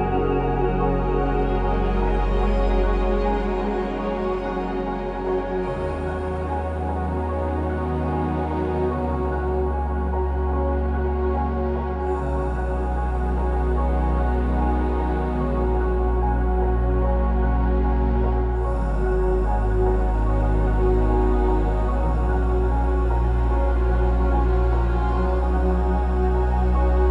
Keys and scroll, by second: 5.2 ctrl+s, 6.7 1, 6.8 Return, 7.2 Escape, 8.1 ctrl+z, 9.1 Escape, 9.4 Escape, 9.4 3, 9.5 Return, 10.5 ctrl+z, 10.7 5, 13.7 typing, 13.8 Return, 15.1 Escape, 15.8 typing, 16.0 Return, 16.6 ctrl+z, 17.6 Return, 17.6 typing, 18.3 ctrl+z, 24.1 BackSpace, 24.3 BackSpace, 24.4 BackSpace.